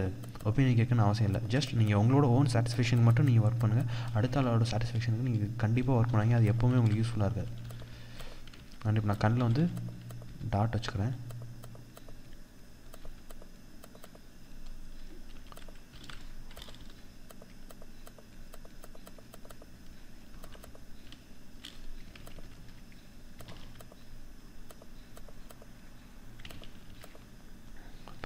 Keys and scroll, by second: 6.1 ctrl+=, 14.8 ctrl+-, 15.4 ctrl+z, 17.0 ctrl+=, 21.6 ctrl+z, 25.9 ctrl+z.